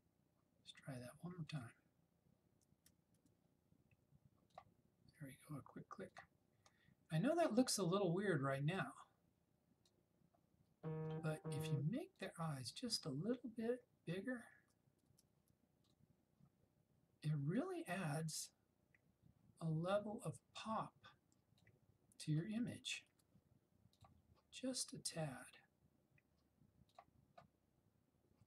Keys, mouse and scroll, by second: 3.2 [, 3.3 [, 4.6 click, 8.9-10.0 drag, 11.0 ], 12.2 click, 14.6 [, 15.1 [, 15.9-21.7 drag, 22.3 ], 22.6 ], 23.1 ], 24.1 click, 27.0-28.4 drag.